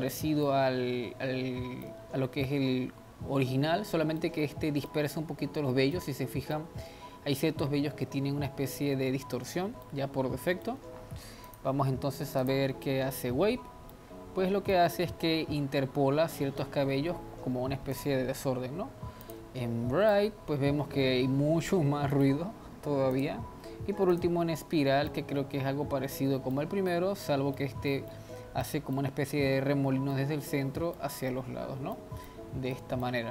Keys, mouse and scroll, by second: 3.3-4.3 scroll up 2, 4.3-5.5 middle drag, 5.5-6.0 scroll down 2, 6.0-6.9 middle drag, 6.9-9.3 scroll up 2, 9.3 scroll up 1, 9.5-10.0 scroll down 1, 10.0-11.5 middle drag, 11.5-13.2 drag, 13.2-13.9 scroll up 2, 13.9-15.0 middle drag, 15.0-15.4 scroll up 2, 16.0-16.3 scroll down 2, 17.9-20.2 drag, 20.2-23.4 middle drag, 23.4-25.1 drag, 25.1-33.3 middle drag.